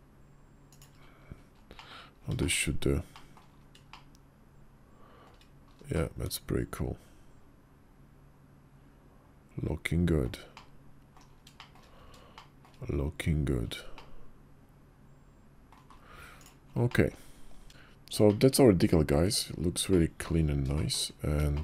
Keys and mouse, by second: 1.6 middle click, 2.2 shift+middle click, 3.0 middle click, 3.8-5.1 shift+middle drag, 5.8 drag, 5.8-10.1 middle drag, 10.4-11.0 middle drag, 11.5 shift+click, 12.2 shift+click, 13.8-15.6 middle drag, 16.2 click, 16.7 middle click, 18.1-18.9 middle drag, 19.8 middle click, 20.6 shift+middle drag, 21.4 shift+click.